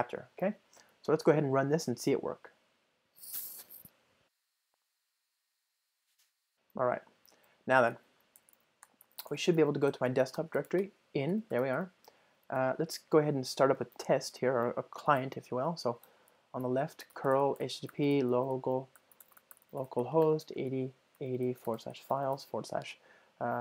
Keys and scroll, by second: 2.2 ctrl+r.